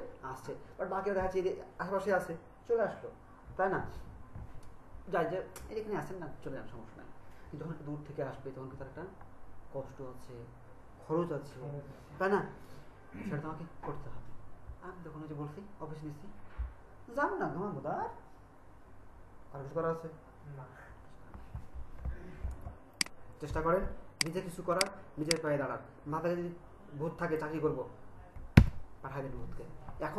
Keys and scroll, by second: 22.6 ctrl+alt+space, 28.6 BackSpace.